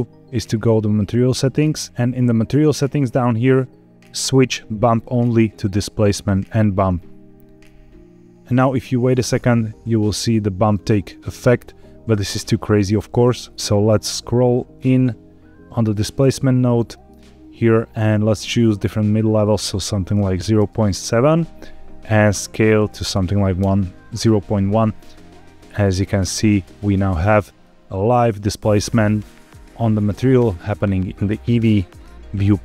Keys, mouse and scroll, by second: 0.4 click, 0.9-1.8 scroll down 5, 2.2-4.1 scroll down 2, 4.1-6.4 drag, 8.9-10.7 middle drag, 12.5 middle click, 13.3-14.1 scroll up 5, 14.1 middle click, 15.8-16.7 scroll up 1, 16.9 middle click, 19.3-20.7 drag, 22.1-23.6 drag, 24.8 scroll down 2, 25.1-26.0 middle drag, 26.3 middle click, 26.8-27.3 scroll up 4, 27.6 middle click, 28.5-29.4 scroll down 1, 30.7-31.3 scroll down 1, 31.3-32.5 scroll up 1.